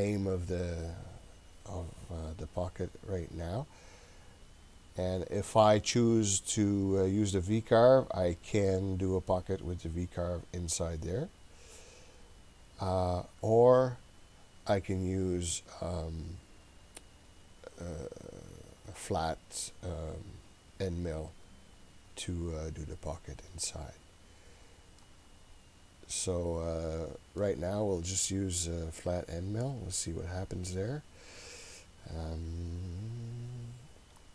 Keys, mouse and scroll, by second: 24.3-24.6 scroll down 2, 25.0-27.5 middle drag, 29.0-32.7 scroll down 20, 32.7-33.6 scroll down 2, 33.6 scroll down 1.